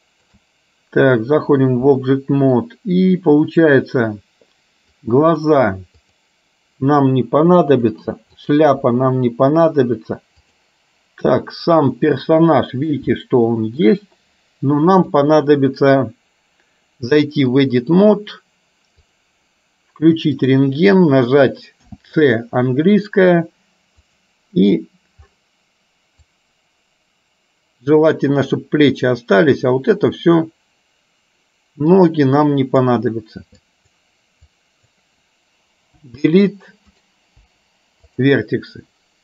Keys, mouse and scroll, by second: 0.0 shift+middle click, 5.2 click, 6.0 click, 7.7 Delete, 8.3 click, 9.0 Delete, 10.5 click, 12.3 middle click, 13.3 shift+middle click, 15.2-18.0 drag, 19.2 click, 22.0 c, 37.5 Delete.